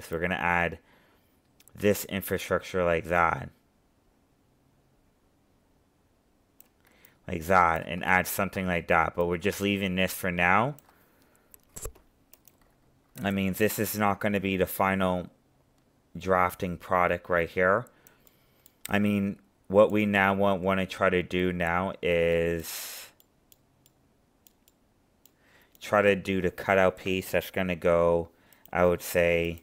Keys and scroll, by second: 8.1 ctrl+z.